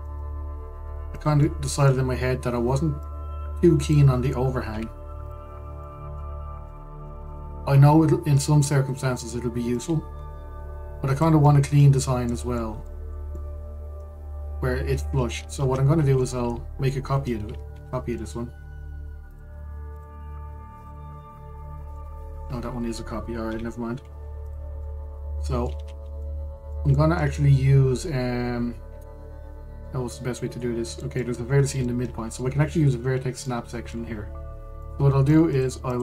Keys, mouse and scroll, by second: 0.3 shift+d, 2.1-3.7 middle drag, 3.7 click, 5.4 KP_Decimal, 6.2-6.5 scroll down 1, 6.5-7.0 middle drag, 7.0 scroll up 1, 7.4-10.4 middle drag, 10.4 click, 12.1-13.7 middle drag, 13.7-14.0 scroll up 1, 14.0-15.5 middle drag, 15.5 scroll, 16.2 ctrl+z, 16.6-16.9 scroll, 16.9-18.4 middle drag, 18.4 shift+d, 20.6 click, 21.5 click, 21.8-22.1 scroll, 22.6-23.3 middle drag, 23.3-24.1 scroll up 1, 24.1 Delete, 24.6-25.1 scroll up 1, 25.1 click, 25.5-26.5 middle drag, 26.5-26.9 scroll up 2, 26.9-32.9 middle drag, 32.9-33.4 scroll up 1, 33.8-34.1 scroll down 1, 34.1 middle click, 34.6-35.5 scroll down 1, 35.5-36.0 middle drag.